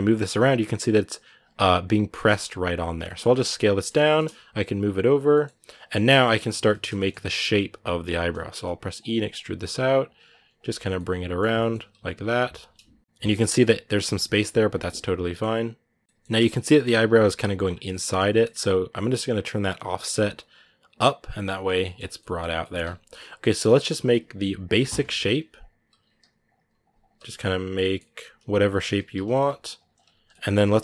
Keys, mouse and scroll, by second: 1.9 middle click, 2.5 s, 3.0 middle click, 3.3 s, 3.6 shift+middle click, 4.1 g, 5.1 middle click, 5.3 r, 5.8 right click, 6.7-7.9 shift+middle drag, 7.9 e, 10.7 middle click, 11.2 Tab, 11.4 middle click, 11.5-13.0 scroll up 1, 13.0-14.3 middle drag, 14.3 g, 14.8-16.0 middle drag, 16.0-16.4 scroll down 1, 16.4 middle click, 16.8 scroll up 1, 17.1-19.4 middle drag, 19.4-21.6 shift+drag, 21.6 middle click, 21.7 scroll down 5, 22.0 middle click, 22.4 scroll up 1, 22.6 Tab, 23.0 right click, 23.3-27.1 shift+right drag, 27.1 scroll down 4, 27.1 middle click, 27.9 Tab, 30.1 middle click, 30.7 scroll up 1.